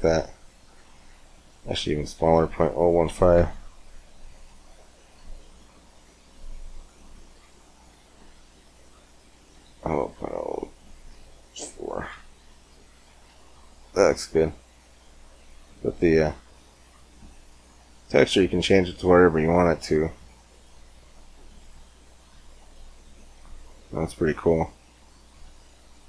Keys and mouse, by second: 3.0-5.5 middle drag, 5.7-7.2 middle drag, 7.4-11.9 drag, 11.9 middle click, 13.1 middle click, 13.3 click, 13.4-15.6 middle drag, 15.6-19.6 drag, 20.6-22.3 drag, 22.5-23.7 middle drag, 23.7-25.4 drag.